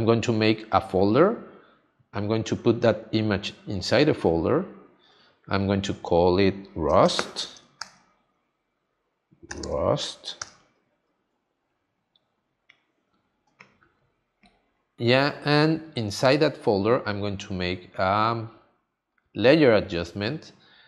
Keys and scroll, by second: 7.8 shift+r, 9.5 u.